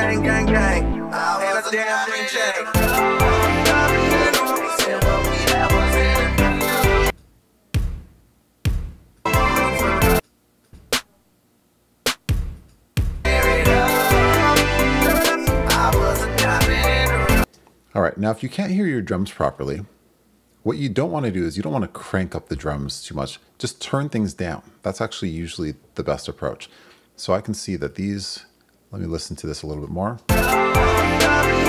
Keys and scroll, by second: 17.4 space, 30.2 space.